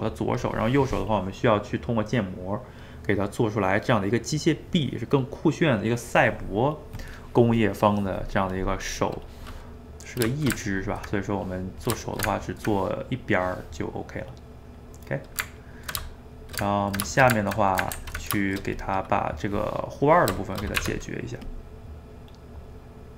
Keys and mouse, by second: 9.9-16.4 middle drag, 16.4 shift+right click, 16.6-18.0 ctrl+middle drag, 18.0 ctrl+s, 18.4 shift+middle click, 18.8 click, 19.2-20.8 middle drag, 20.8 Tab, 21.5 click, 21.8-23.1 middle drag.